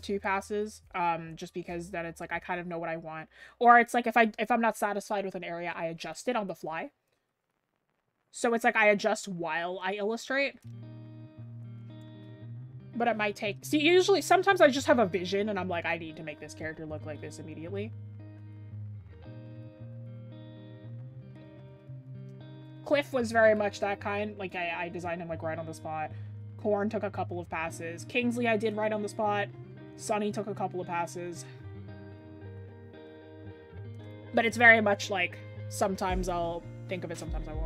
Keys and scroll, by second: 34.2 scroll down 1, 35.9-36.3 scroll up 1.